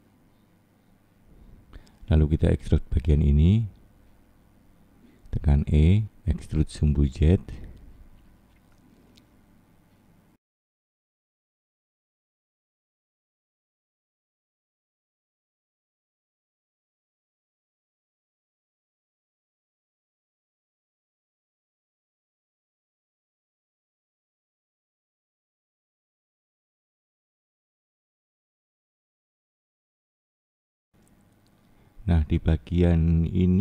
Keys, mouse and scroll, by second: 1.9 click, 3.5 click, 4.1 middle click, 5.4 e, 8.1 scroll down 2, 10.0 click, 12.5-13.1 scroll down 2, 13.1 middle click, 14.1-14.7 scroll up 3, 14.7 middle click, 14.9 click, 15.4 click, 18.6-19.2 scroll down 3, 19.2 middle click, 20.9 click, 24.2 middle click, 25.5-26.0 scroll up 2, 26.0 middle click, 29.4-30.1 scroll up 3, 30.1 middle click, 32.6 middle click, 33.4-33.6 scroll down 10.